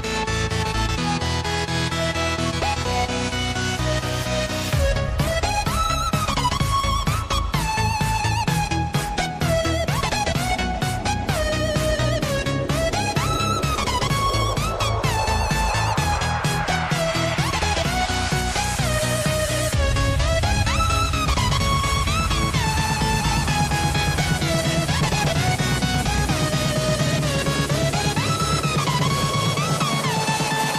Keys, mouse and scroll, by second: 1.1-1.8 scroll down 2, 1.8 click, 3.2 KP_7, 4.2-4.7 scroll up 2, 4.7 click, 5.6 shift+d, 8.3 Tab, 9.0 click, 10.6 ctrl+r, 16.2 Tab, 17.2 click, 18.0 KP_7, 18.6 click, 19.6 click, 20.4 Tab, 21.2 click, 22.6 shift+click, 23.1 shift+click, 23.7 shift+click, 24.1 shift+click, 24.8 click, 26.1 click, 27.4 ctrl+z, 28.0 e, 30.3 Tab.